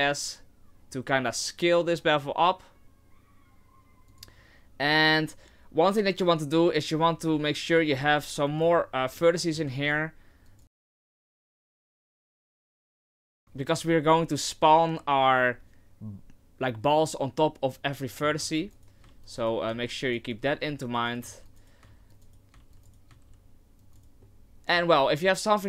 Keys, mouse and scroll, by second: 4.7-5.1 scroll down 2, 7.9 ctrl+r, 9.1 middle click, 9.8 ctrl+r, 11.3 ctrl+r, 11.7 ctrl+r, 12.4 ctrl+r, 18.1 middle click, 18.4 ctrl+r, 19.1 ctrl+r, 19.7 ctrl+r, 20.5 ctrl+r, 21.3 ctrl+r, 22.1 ctrl+r, 22.6 ctrl+r, 23.1 ctrl+r, 24.2 middle click, 25.2 middle click.